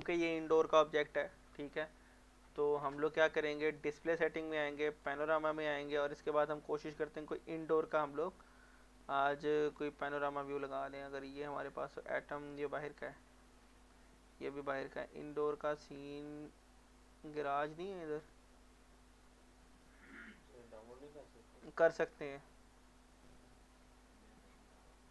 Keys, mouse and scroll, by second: 5.1 click, 6.6-7.6 scroll down 1, 7.6-9.4 scroll up 1, 10.1-11.2 scroll up 1, 14.9-16.2 scroll down 1, 16.2 scroll up 1, 21.7 scroll down 1.